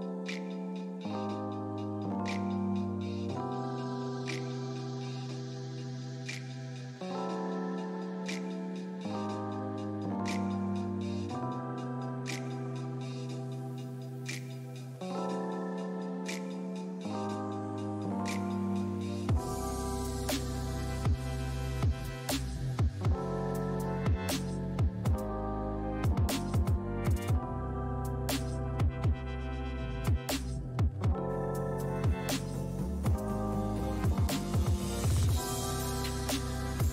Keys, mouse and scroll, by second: 0.3 shift+c, 0.9 f, 1.7 click, 2.2 f, 3.9 f, 5.1-8.2 drag, 8.2-9.4 ctrl+middle drag, 9.4 click, 10.2-11.7 middle drag, 14.6 g, 14.8 f, 16.4 f, 17.5-27.8 drag, 27.8 f, 29.1-36.9 drag.